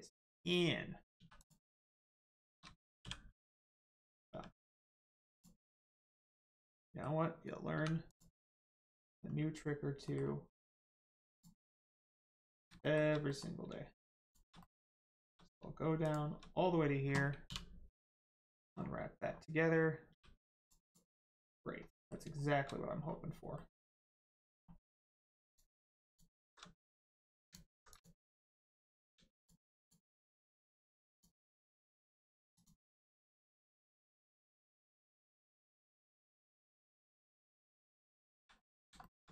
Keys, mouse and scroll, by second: 1.1 2, 1.3 click, 2.1 shift+click, 3.8 click, 3.9 click, 4.3 q, 5.3 click, 5.7 scroll down 1, 5.9 middle click, 7.7 3, 8.1 click, 8.4 middle click, 9.2-9.8 scroll down 1, 10.0 middle click, 10.7 click, 11.3 shift+click, 12.5 scroll down 1, 12.8 shift+middle click, 13.3 middle click, 14.2 shift+click, 14.5 middle click, 15.1 shift+middle click, 16.0 shift+click, 18.4 shift+middle click, 18.7 scroll up 1, 20.1 g, 20.6 click, 21.9 middle click, 22.9-23.5 scroll up 1, 23.5 middle click, 25.4 click, 26.1 alt+shift+click, 26.7 alt+click, 27.4 shift+click, 28.9 click, 29.3 shift+click, 29.7 shift+click, 32.1 shift+click, 32.5 shift+click, 33.0 shift+click, 33.4 shift+click, 33.9 shift+click, 34.3 shift+click, 35.0 shift+click, 35.4 shift+click, 35.9 shift+click, 36.4 shift+click, 37.1 shift+click, 37.6 shift+click, 38.2 shift+click, 38.6 middle click, 39.0 shift+middle click.